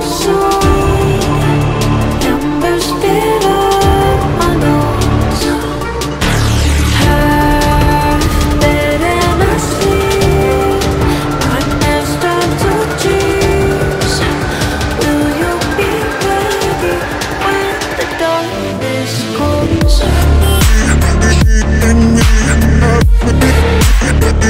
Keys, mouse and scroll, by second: 1.8 typing, 6.6 ctrl+click, 7.6 ctrl+g, 7.9 ctrl+t, 10.5 alt+scroll down 1, 10.7-11.0 alt+scroll up 1, 11.6 BackSpace, 12.6 Delete, 13.2 alt+scroll up 1, 16.0 double click, 16.3 alt+scroll down 1, 16.6-16.9 alt+scroll up 1, 17.6-19.4 typing, 21.1 typing, 23.8-24.3 typing.